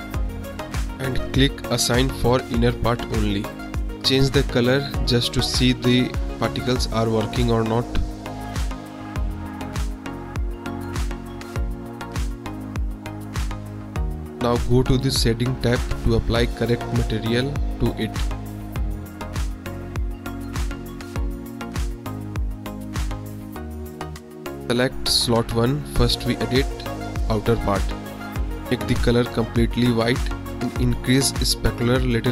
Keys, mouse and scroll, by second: 0.0-1.4 shift+drag, 2.1 click, 8.9 click, 9.8 Tab, 11.0 click, 11.0 middle drag, 11.2 click, 11.3 middle drag, 11.4 drag, 11.6 middle click, 11.8 middle drag, 12.4 middle drag, 17.0 click, 17.9-18.4 drag, 20.4 click, 21.6 click, 22.6-23.0 drag, 23.3 middle drag, 25.8-26.7 drag, 28.0 click, 31.4-32.3 drag.